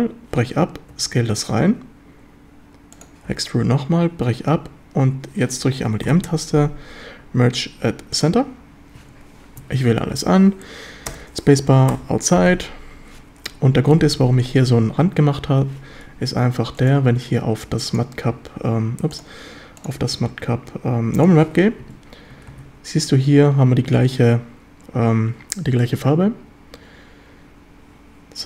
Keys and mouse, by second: 0.9 s, 3.0 click, 3.3 e, 6.1 m, 9.2 a, 9.6 a, 11.2 space, 12.5 a, 13.5 KP_7, 14.0 Tab, 16.9-18.3 drag, 19.1-21.5 drag.